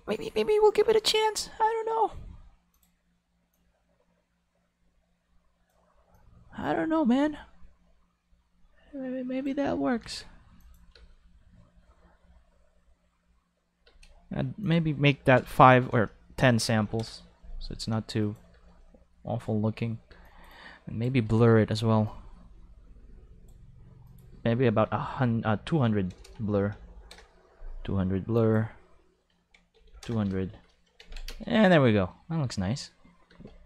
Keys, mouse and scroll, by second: 1.0 click, 2.7 click, 3.5-5.7 drag, 6.1 click, 10.0 alt+a, 10.2 5, 10.6 click, 10.9 space, 11.0 5, 13.8 space, 14.0 5, 15.5-18.6 typing, 15.9 Left, 17.0 Return, 18.2 click, 20.1 space, 20.2-21.3 drag, 20.2 5, 22.0-24.3 drag, 24.7 5, 26.1 ctrl+Left, 26.1-27.1 typing, 26.2 ctrl+Left, 27.1 Return, 28.3 click, 29.3 5, 29.7 0, 29.8 5, 30.0 Return, 30.1 5, 31.0 ctrl+s, 31.1 ctrl+5, 31.2 space, 33.3 space, 33.4 5.